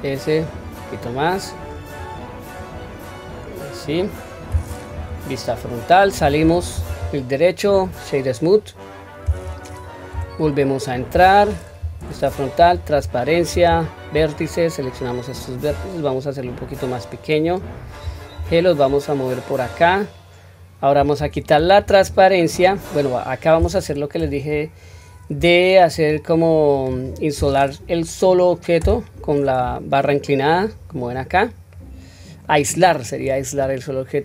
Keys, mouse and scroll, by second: 1.0 middle click, 1.9 scroll up 1, 2.5-3.0 scroll down 1, 3.0-4.0 middle drag, 3.0 scroll down 1, 4.1-4.9 scroll up 1, 4.9 scroll up 1, 4.9 KP_1, 5.5-6.1 scroll down 2, 6.1 Tab, 6.7 right click, 10.1 Tab, 10.5-11.8 scroll up 2, 11.8 KP_1, 12.5 q, 13.6 1, 14.3 click, 15.6 s, 21.6-23.6 middle drag, 31.2-32.4 scroll down 2, 31.6-32.4 middle drag, 32.8 middle click, 33.5-34.2 scroll up 1.